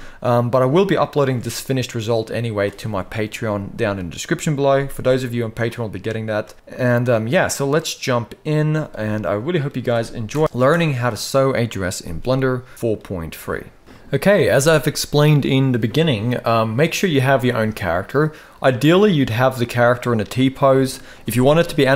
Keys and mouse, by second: 0.9 space, 6.1 space, 6.8-8.0 middle drag, 8.3 z, 9.0-9.3 middle drag, 10.1 shift+Left, 10.4 space, 12.5 middle click, 13.8 middle click, 16.9-17.2 shift+middle drag, 18.5-18.9 middle drag.